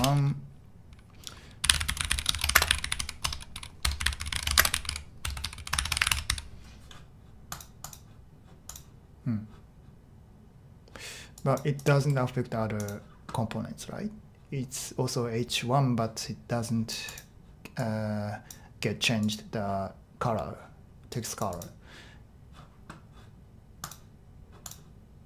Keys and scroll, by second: 0.0-0.3 typing, 1.3-6.7 typing.